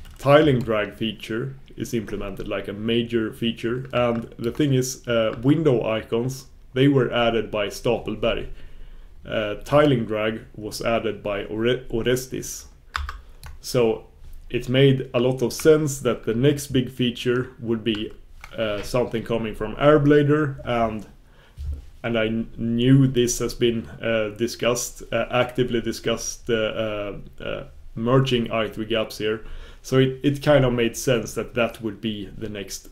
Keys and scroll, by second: 0.8 super+b.